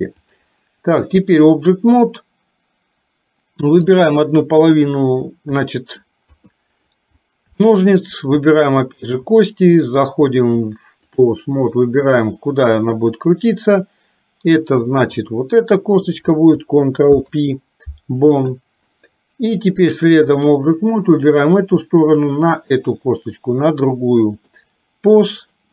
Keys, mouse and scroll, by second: 0.3-1.3 drag, 5.7 shift+middle click, 7.7 shift+middle click, 10.5 click, 15.2 click, 17.2 ctrl+p, 19.9 click, 21.3 click, 22.2 shift+click, 23.5-24.5 drag, 25.5 click.